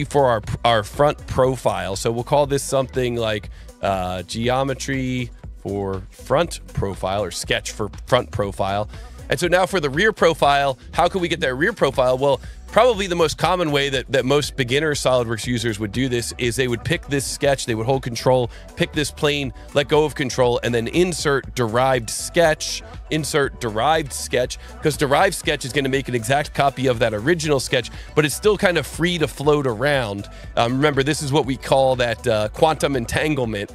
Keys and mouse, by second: 1.0 click, 3.8-7.6 typing, 8.5 click, 15.5 click, 17.0 click, 19.1 ctrl+click, 20.7 click, 25.1 click, 27.8 click.